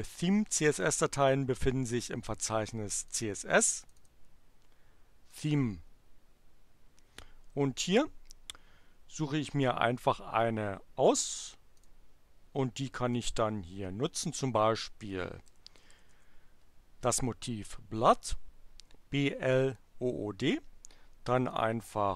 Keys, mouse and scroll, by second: 1.1 click, 2.9 click, 3.7 click, 5.2 click, 11.8 click, 13.1-14.5 drag, 14.8-16.6 typing, 21.5 click.